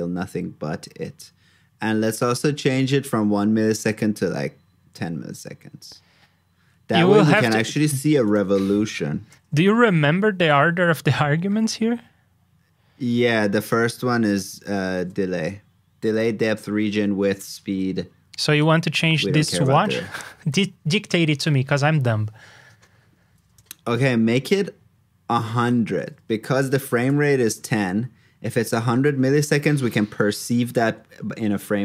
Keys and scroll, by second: 9.3 super+j, 14.6 super+c, 14.9 super+j.